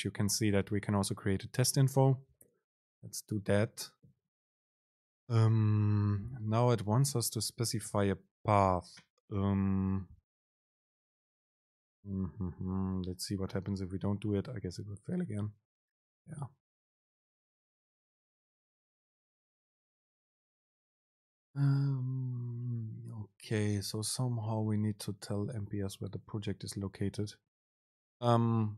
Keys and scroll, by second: 11.1 super+space, 14.7 super+r.